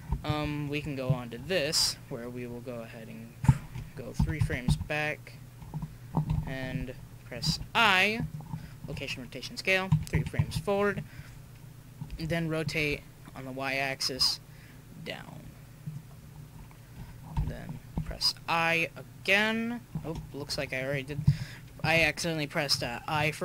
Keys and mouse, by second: 0.2 click, 0.4 click, 0.8-1.6 drag, 4.2 Left, 4.4 Left, 4.7 Left, 6.3 i, 7.5 i, 9.9 Right, 10.1 Right, 12.1 r, 17.3 i, 17.9 i.